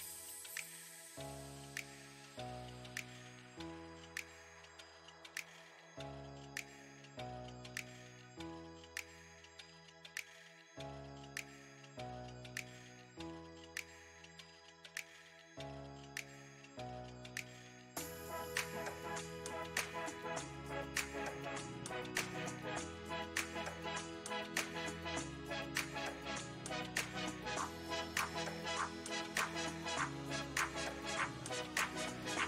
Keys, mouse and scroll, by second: 0.2-2.8 middle drag, 2.8-3.9 drag, 3.9-5.7 middle drag, 5.7-8.4 drag, 8.6-10.1 middle drag, 10.1 ctrl+z, 11.3-19.0 drag, 19.0-20.1 middle drag, 20.1 ctrl+z, 20.5 ctrl+z, 22.0-24.7 drag, 24.8-27.4 middle drag, 27.4 click, 28.3-29.8 middle drag, 29.8-30.9 drag, 30.9-32.3 middle drag, 32.3-32.4 drag.